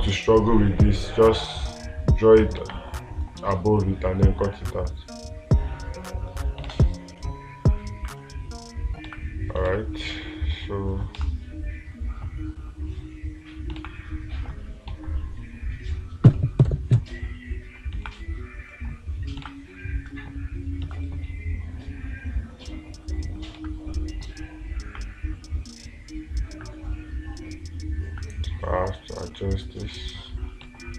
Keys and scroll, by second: 3.1 space, 9.5 space, 10.1 space, 14.3 space, 15.3 ctrl+z, 18.5 space, 19.9 space, 24.0 space.